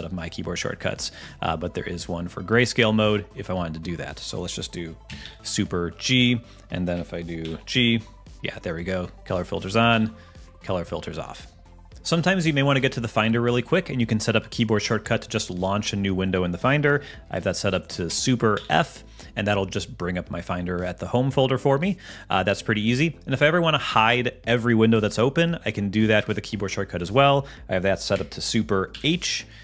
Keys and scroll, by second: 5.2 ctrl+alt+super+g, 7.4 ctrl+alt+super+g, 9.9 ctrl+alt+super+g, 18.6 ctrl+alt+super+f, 28.9 ctrl+alt+super+h.